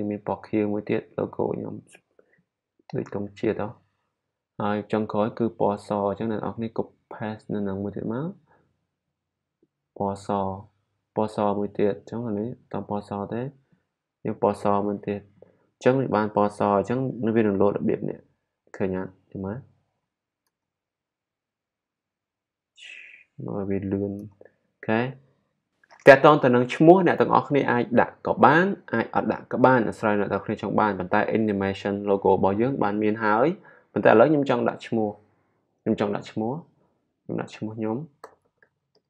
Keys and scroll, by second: 37.9-39.0 typing.